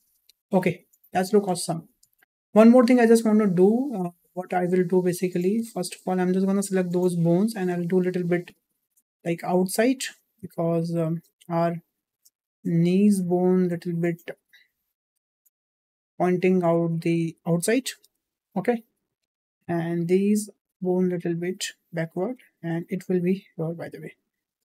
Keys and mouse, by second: 0.8 shift+middle click, 1.7 shift+middle click, 5.3 shift+middle drag, 6.2 click, 7.6-9.7 drag, 10.1 shift+middle click, 10.6 click, 11.5-12.7 drag, 13.3 shift+middle click, 14.2 click, 15.4-16.8 drag, 18.8 shift+middle click, 19.4 shift+middle click, 19.9 click, 20.9-22.0 drag, 22.9 click, 23.5 click.